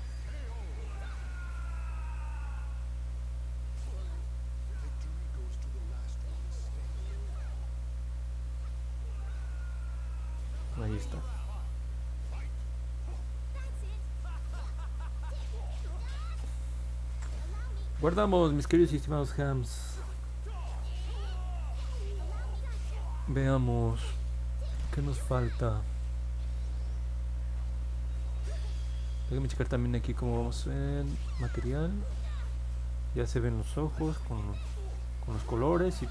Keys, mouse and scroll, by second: 0.5 click, 0.9 click, 1.1 click, 2.8-3.8 alt+drag, 4.4 alt+middle click, 5.0-6.3 alt+drag, 6.6 middle click, 7.0 middle click, 7.3-9.8 alt+drag, 10.0 middle click, 10.3 middle click, 10.7 middle click, 11.1-13.6 alt+drag, 13.8 middle click, 14.4 alt+middle click, 15.6 alt+click, 30.4 click, 31.3 click, 32.4-32.7 scroll down 1, 32.9 scroll up 1, 34.3-36.1 alt+drag.